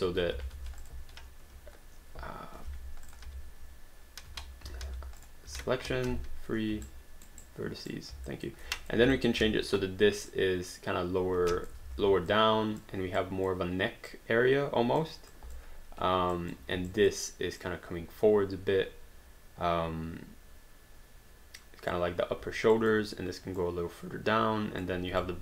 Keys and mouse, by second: 0.8 click, 1.1 3, 1.4 q, 2.7 3, 3.1 click, 3.3 3, 4.3 q, 4.8 alt+d, 5.2 click, 5.5 q, 6.1 3, 6.9 alt+right click, 7.6 right click, 8.3 alt+click, 8.7 click, 9.2 alt+click, 9.4 w, 10.3 click, 11.8 ctrl+z, 12.3 click, 13.2 click, 14.1 click, 15.3 click, 16.4 click, 22.8 click, 25.2 alt+click.